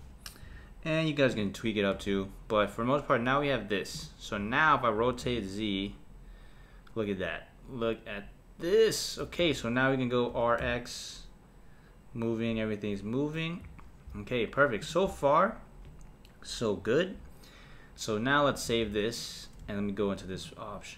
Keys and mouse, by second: 0.5 Tab, 1.3 click, 2.0 Tab, 4.0 click, 5.0 r, 10.3 r, 14.8 click, 18.7 s.